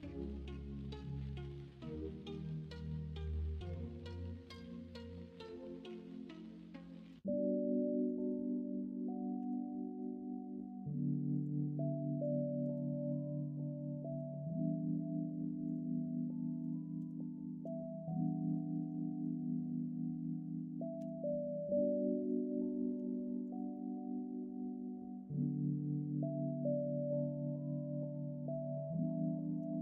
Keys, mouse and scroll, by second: 4.8 middle click, 7.2 ctrl+r, 9.3 k, 9.7-12.7 middle drag, 12.8 middle click, 14.0 k, 17.5 middle click, 18.1 alt+z, 18.7 alt+z, 19.0 middle click, 20.9 /, 22.7 middle click, 22.9 Tab, 23.7-28.5 middle drag, 28.9 middle drag, 29.4 shift+middle click.